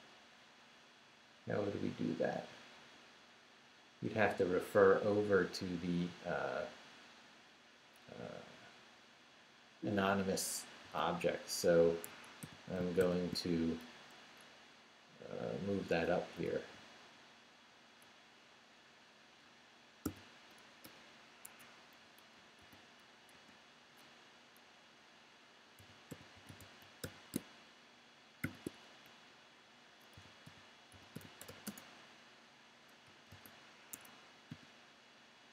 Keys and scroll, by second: 8.6 Left, 10.8 o, 12.0 Escape, 12.4 u, 13.0 shift+o, 16.2 Down, 16.5 Right, 20.0 shift+d, 20.8 shift+BackSpace, 21.4 ↺, 22.0 Right, 22.6 shift+d, 23.3 shift+a, 24.0 a, 25.5-28.4 typing, 29.0 shift+Up, 29.7 Up, 29.9-32.0 typing, 33.0 =, 33.3 space, 33.9 Escape, 34.5 shift+p.